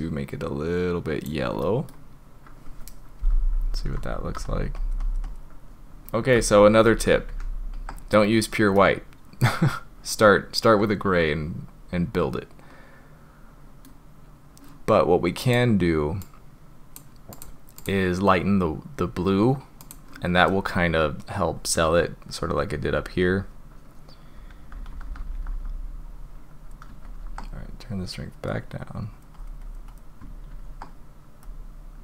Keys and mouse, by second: 1.6 middle click, 3.8 ], 4.0 ], 4.2 ], 4.4 click, 4.8 click, 5.0 click, 5.2 drag, 5.6-6.3 middle drag, 6.5 ctrl+z, 6.7 ctrl+z, 6.9 ctrl+z, 7.2 ctrl+z, 8.7-13.8 middle drag, 15.4 click, 17.9-19.9 drag, 24.3-25.5 typing, 25.7 click, 27.0 ctrl+z, 28.0 click, 29.1 click, 29.4 click, 29.6 click, 29.9 click, 30.5 ctrl+z, 31.5 click.